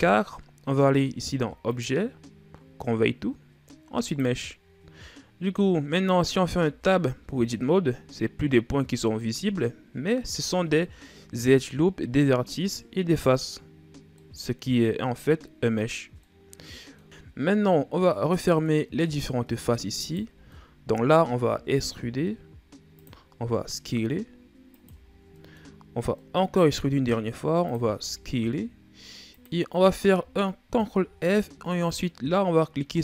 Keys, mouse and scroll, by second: 1.5-4.5 drag, 5.1 scroll down 2, 5.3-6.2 middle drag, 6.2 Tab, 7.4-9.5 middle drag, 9.5-10.3 scroll up 2, 10.3 shift+scroll down 2, 10.6-13.6 middle drag, 14.0 middle click, 14.9-15.4 scroll down 1, 16.0-18.7 middle drag, 18.7-19.8 scroll up 2, 19.8 alt+right click, 20.3 middle click, 21.2 e, 23.2 s, 24.9-25.2 scroll down 1, 25.2 middle click, 25.5-26.0 scroll up 1, 26.0 middle click, 26.4 e, 27.8 s, 30.5 ctrl+f.